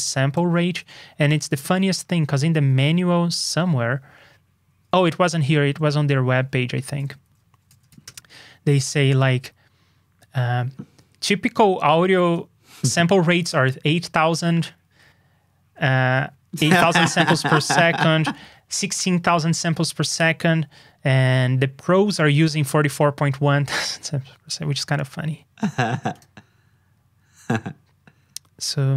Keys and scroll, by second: 1.6 super+j, 5.4 super+Tab, 6.8 super+n.